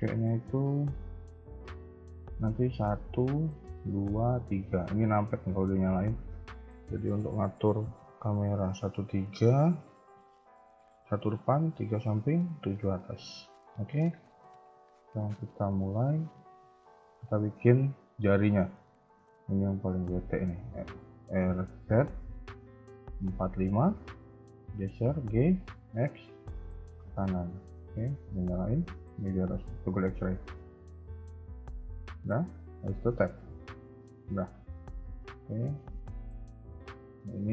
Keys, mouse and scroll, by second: 1.3 n, 2.7 KP_1, 3.7 KP_2, 4.3 KP_3, 5.9-8.9 typing, 10.1 KP_1, 11.3 KP_3, 12.3 KP_7, 13.9-14.5 scroll up 2, 16.0 scroll down 2, 16.8 shift+middle click, 18.7 r, 24.6 g, 27.1 shift+middle click, 30.3 click, 31.3 Tab, 33.7 a, 33.9 a, 34.9 b, 36.2 shift+middle click.